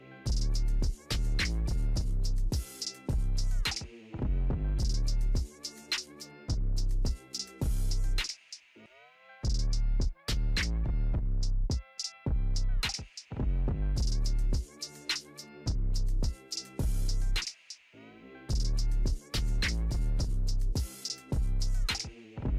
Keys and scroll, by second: 7.6 ctrl+t.